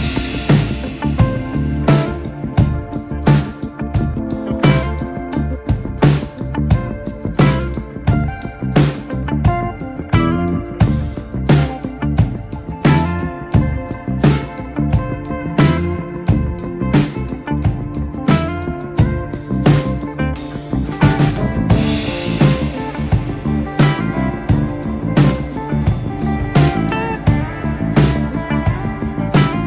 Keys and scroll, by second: 7.0 ctrl+space, 8.0 ctrl+space, 8.3 r, 9.8-11.2 typing, 11.9 ctrl+z, 14.2 space, 15.6 x, 17.1 x, 18.4-21.3 typing, 22.3 3, 23.8 Escape, 24.7 r, 24.8 space, 26.7 x, 27.7 ctrl+space, 27.8 r.